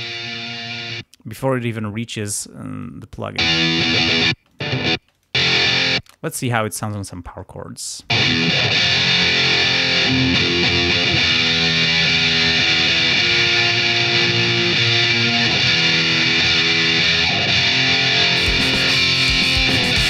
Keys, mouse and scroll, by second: 0.1 click, 1.0 space, 2.8 click, 3.4 space, 4.3 space, 4.5 click, 5.2 click, 5.7 ctrl+scroll down 1, 6.0 space, 6.4 ctrl+scroll up 2, 8.0 click, 8.1 space, 8.4-8.7 ctrl+scroll up 1, 14.1-14.5 ctrl+scroll down 2, 14.5-15.0 ctrl+scroll up 2, 16.2 ctrl+scroll down 2, 18.5 click.